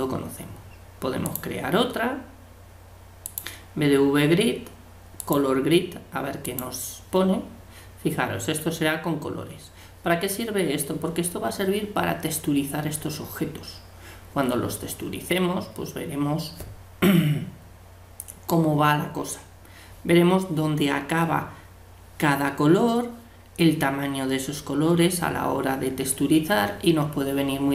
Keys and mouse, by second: 6.7-27.7 middle drag.